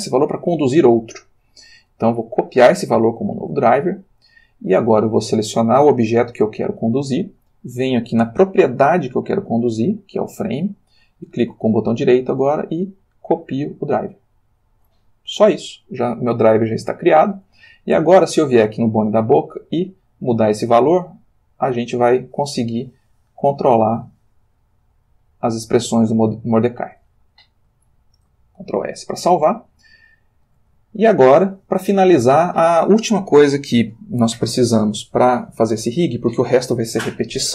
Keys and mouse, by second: 2.6 click, 5.6 click, 8.0 click, 11.8 right click, 12.0 middle click, 13.5 click, 16.3 click, 19.7 click, 20.4 click, 21.6 click, 22.2 click, 23.5 click, 24.5 click, 25.9 click, 26.5 click, 28.2 ctrl+s, 29.5-30.7 shift+middle drag, 31.0-32.6 ctrl+shift+middle drag.